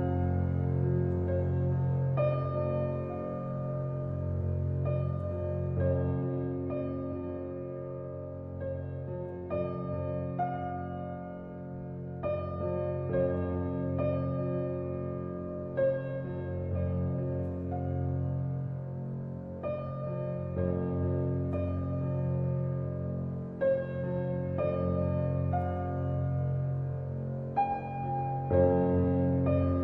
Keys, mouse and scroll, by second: 0.0 click, 0.6-2.4 middle drag, 2.4-3.6 drag, 3.6-5.3 middle drag, 5.3 click, 8.3-10.3 middle drag, 10.3 click, 11.1 click, 16.8-18.0 drag, 18.3 Tab, 19.0 shift+middle click, 19.4 scroll up 1, 19.6-21.1 shift+middle drag, 21.1-24.2 drag, 26.2 click, 28.0 click, 29.1 ctrl+b.